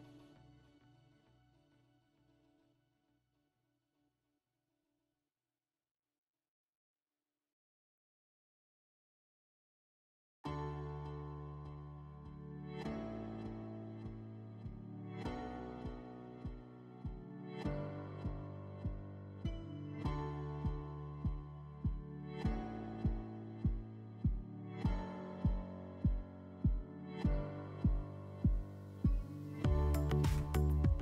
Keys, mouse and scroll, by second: 0.4 click, 1.8 click, 2.3 click, 4.0 F4, 7.1 alt+middle click, 13.2 click, 14.3 right click, 17.0 click, 18.9 F4, 21.3 alt+middle click, 25.4 click, 26.7 click, 27.6 ctrl+click, 30.5 alt+middle click.